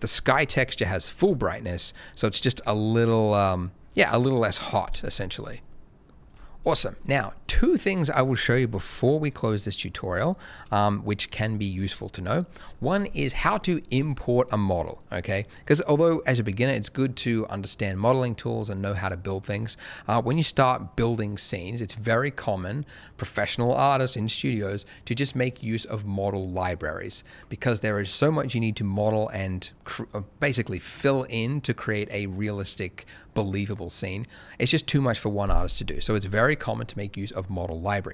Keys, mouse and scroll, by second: 0.6 shift+middle click, 8.3 middle click.